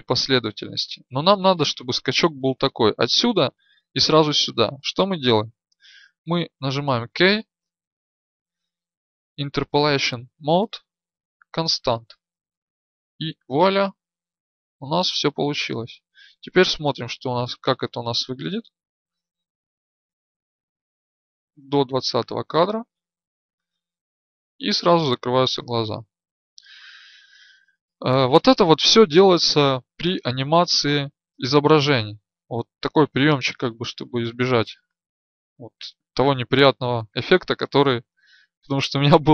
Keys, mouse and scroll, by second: 13.9-15.3 drag, 17.4 click, 20.6-22.6 Right, 22.9 Right, 23.3 Right, 23.8 Right.